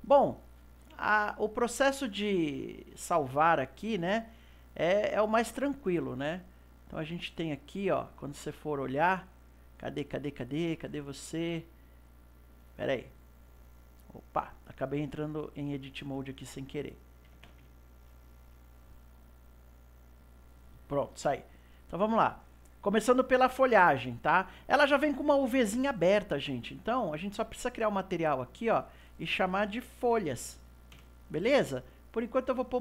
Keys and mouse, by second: 1.1-6.9 middle drag, 6.9 click, 8.4 click, 9.5 click, 11.2 click, 22.4 right click, 26.9 click, 27.8 click, 28.7-31.8 drag, 32.6 click.